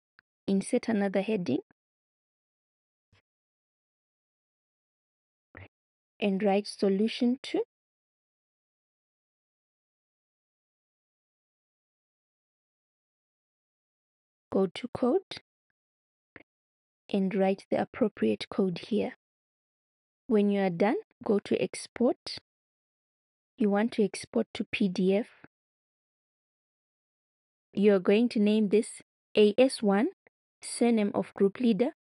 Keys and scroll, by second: 6.2-10.3 typing, 13.1 Return.